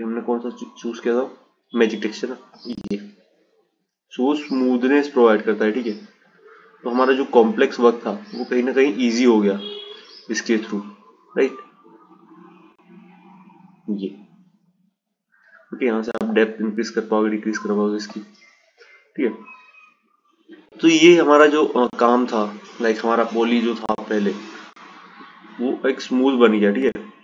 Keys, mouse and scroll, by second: 1.6-4.5 drag, 6.7-9.8 drag, 13.3-16.2 drag, 16.8 click, 21.1-27.0 right drag.